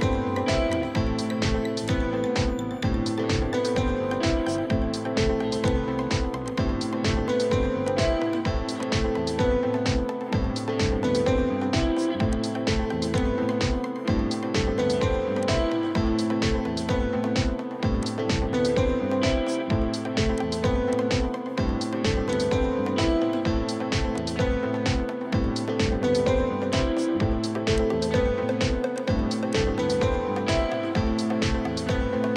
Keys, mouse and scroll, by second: 2.4 right click, 10.3 Escape, 10.4 Escape, 13.7-14.1 scroll down 1, 19.2 Escape, 19.4 Escape, 24.9 Escape, 25.0 Escape, 25.5-26.1 scroll up 1, 30.5-32.3 scroll up 1.